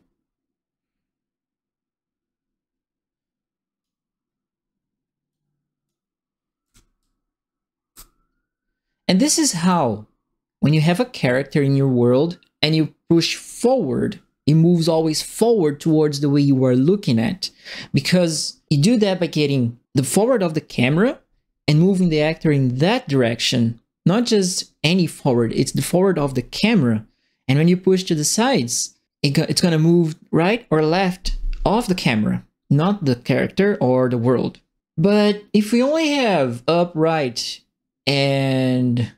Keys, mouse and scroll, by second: 5.3 click, 6.4-7.4 typing, 6.6-8.0 right drag, 9.6 click.